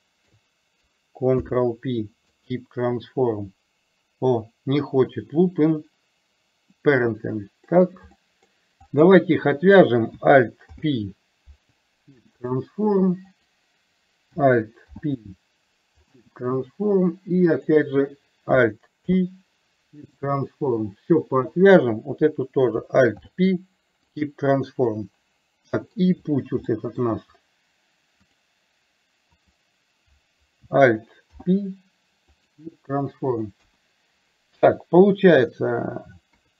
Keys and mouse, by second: 0.1 shift+click, 1.4 ctrl+p, 6.8-7.7 middle drag, 8.3 middle drag, 8.9 click, 10.8 alt+p, 14.9 alt+p, 17.6 click, 19.1 alt+p, 23.2 alt+p, 25.8 middle click, 26.7-27.2 middle drag, 28.4 click, 29.6 click, 31.3 alt+p, 33.7 KP_1, 36.3 KP_3.